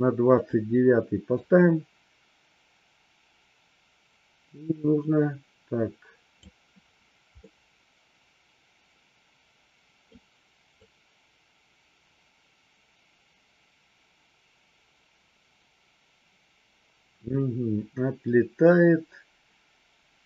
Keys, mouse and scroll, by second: 0.4 click, 1.4-6.4 drag, 7.4-10.0 middle drag, 10.7-20.2 drag.